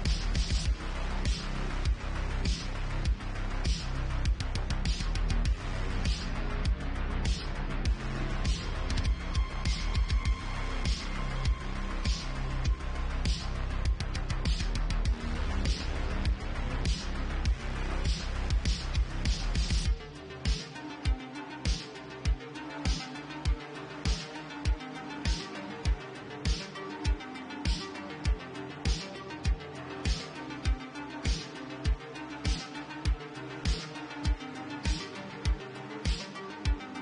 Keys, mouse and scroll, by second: 0.7 ctrl+x, 1.4-1.9 middle drag, 1.7 Tab, 2.6 ctrl+x, 3.0 Tab, 3.4 middle drag, 4.2 click, 5.4 click, 5.7 Tab, 6.4 ctrl+r, 11.7 shift+click, 12.1 j, 12.3 click, 12.8 drag, 12.9 middle click, 12.9 j, 13.1 click, 13.5 shift+click, 13.7 j, 15.4 shift+click, 15.7 j, 17.1 middle click, 17.4 Tab, 18.3 alt+middle click, 18.4 alt+x, 19.1 click, 19.8-23.8 middle drag, 24.0 alt+x, 24.9 click, 27.1 Tab, 27.3-29.3 middle drag, 29.3 click, 29.4 middle click, 29.9 click, 30.0-33.4 middle drag, 30.9 Tab, 31.6 Tab, 33.4 click, 33.5-34.3 middle drag, 34.6 shift+click, 34.7 middle click, 35.0 1, 35.7 shift+click, 35.8-36.5 shift+middle drag, 36.0 1, 36.5 click, 36.6-37.0 middle drag.